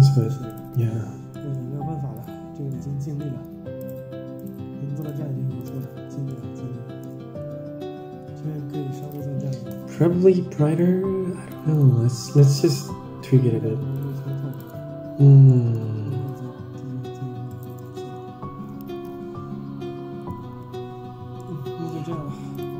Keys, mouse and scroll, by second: 0.5 ctrl+shift+drag, 0.5 scroll up 4, 1.3 middle click, 2.3 click, 2.7-3.2 middle drag, 3.7 ctrl+shift+click, 4.3 ctrl+shift+click, 4.9 ctrl+shift+click, 5.5 ctrl+shift+click, 6.0-6.8 scroll up 3, 6.3-7.1 middle drag, 7.4 Tab, 8.9-10.2 drag, 11.7 ctrl+shift+click, 13.9 ctrl+shift+click, 14.5 ctrl+shift+drag, 15.2 Tab, 15.4 middle click, 16.2-17.6 shift+drag, 17.6 shift+right click, 19.0 ctrl+z, 19.8 Tab, 21.0 scroll down 5, 21.3 middle click, 22.4 click.